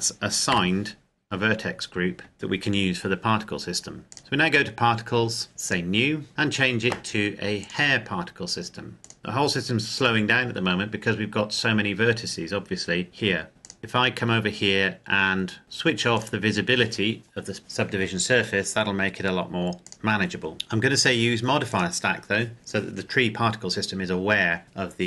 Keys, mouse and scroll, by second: 0.3 Tab, 2.3 z, 4.0 click, 7.4 click, 13.5 click, 16.0 click, 19.6 click, 21.5 click.